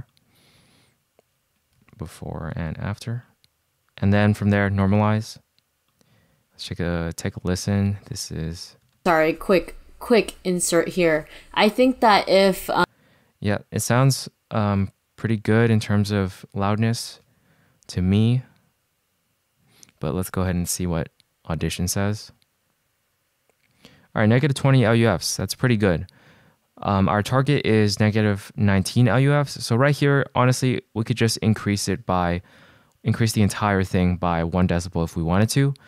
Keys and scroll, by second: 1.9 super+z, 2.7 shift+super+z, 4.6 c, 9.0 space, 12.8 space, 17.2 shift+w.